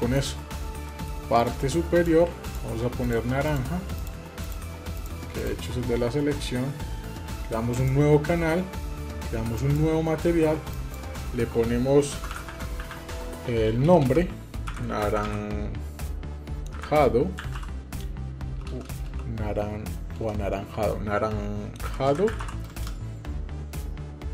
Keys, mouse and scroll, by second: 0.6 middle click, 1.1 click, 1.7-3.7 shift+drag, 4.2-5.5 shift+drag, 7.5 click, 9.3 click, 10.5-24.3 drag, 13.4 BackSpace, 13.8 BackSpace, 18.5 BackSpace, 18.8 BackSpace.